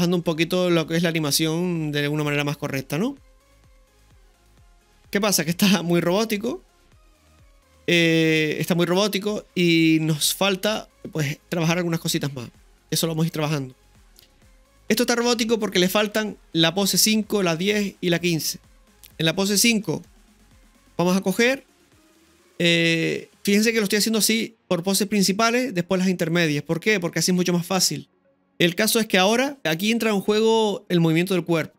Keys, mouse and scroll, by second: 5.6-6.5 scroll down 2, 5.7-6.5 middle drag, 9.4-13.4 middle drag, 18.7 click, 18.7-19.6 scroll up 3, 18.7 space, 19.6-20.1 shift+middle drag, 21.0-23.6 scroll down 1, 28.3 shift+middle click, 28.3 scroll down 1, 29.6 ctrl+z.